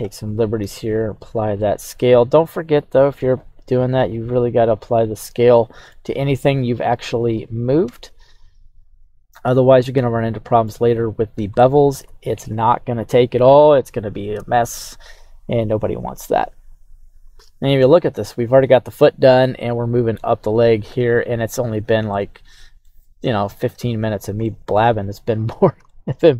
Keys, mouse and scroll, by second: 0.6 ctrl+a, 1.5 scroll down 1, 1.6-2.0 middle drag, 2.3 scroll down 1, 3.0 right click, 3.9 ctrl+a, 5.6 middle click, 6.7 click, 7.3 right click, 7.8 KP_3, 8.3-8.6 right drag, 9.0-9.4 scroll up 2, 10.2-10.6 shift+middle drag, 11.0-11.5 scroll up 2, 11.5-11.9 shift+middle drag, 12.1-12.9 scroll down 1, 15.5-17.3 scroll down 3, 17.3-17.7 scroll up 6, 17.7 scroll down 4, 22.1-23.7 shift+middle drag, 23.7 KP_3, 24.4-24.9 shift+middle drag, 25.0-25.7 scroll up 3, 25.8-26.2 shift+middle drag.